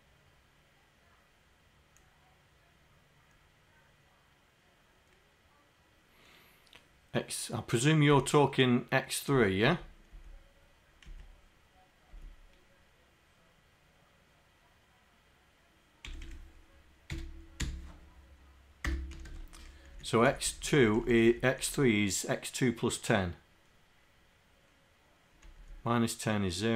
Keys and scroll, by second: 8.2 Left, 9.7 Left, 10.2 Left, 11.1 Right, 12.1 Down, 16.3 Delete, 17.1 x, 17.7 2, 19.3 KP_0, 19.9 Down, 20.3 Down, 20.5 Down, 20.8 Down, 21.7 Down, 25.6 Down.